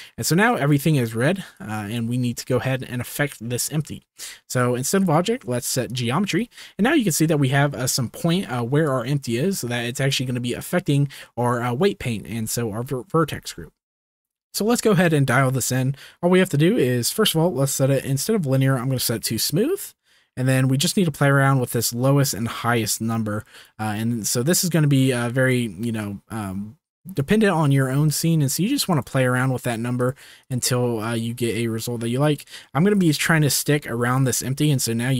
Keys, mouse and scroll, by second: 0.4 click, 1.5 click, 2.7 shift+middle click, 5.1-5.9 drag, 8.8-10.1 drag, 17.0 click, 17.9-19.0 drag, 20.6-21.7 drag, 22.3-23.7 drag, 24.2-25.6 drag, 26.0-27.3 drag, 27.3 middle click, 28.1 click, 29.9 click, 30.4 click, 32.4 click, 33.5 shift+middle click, 34.4 shift+middle click.